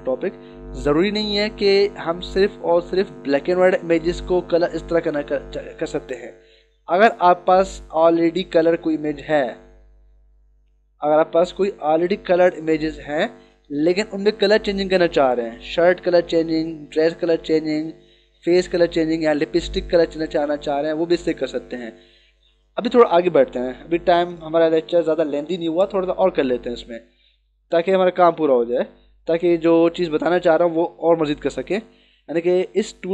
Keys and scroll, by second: 28.1 ctrl+=, 30.9 ctrl+=.